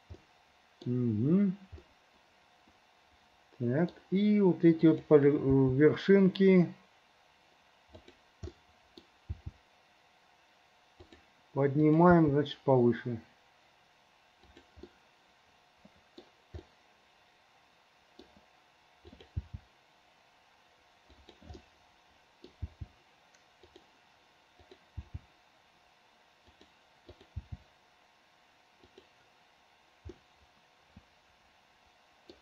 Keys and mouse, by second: 0.3 middle click, 2.0-3.9 middle drag, 5.0 click, 5.7 g, 8.7 click, 9.4 g, 11.9 click, 12.3 g, 15.0-16.4 middle drag, 16.7-18.4 middle drag, 19.2 middle click, 19.5 g, 21.7 middle click, 22.1 click, 22.8 g, 24.6 click, 25.1 g, 27.1 click, 29.0 g, 30.4-32.4 middle drag.